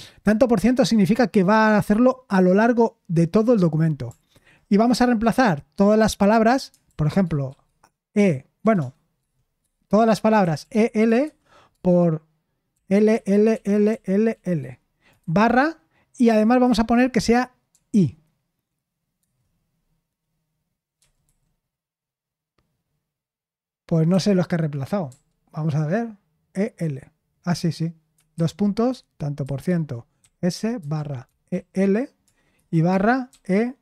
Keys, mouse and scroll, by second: 4.3 /, 6.8-7.4 typing, 8.6 typing, 10.4-11.2 typing, 12.7-15.2 typing, 17.7 i, 19.2 Return, 21.0 typing, 24.1 n, 25.0 u, 29.4-33.8 typing.